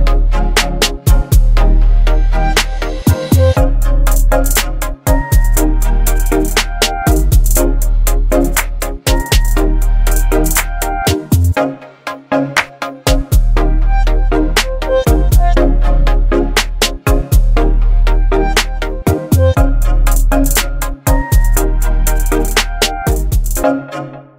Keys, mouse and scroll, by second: 0.6 ctrl+g, 2.8-5.0 drag, 6.3-13.1 alt+drag, 16.7-19.5 drag.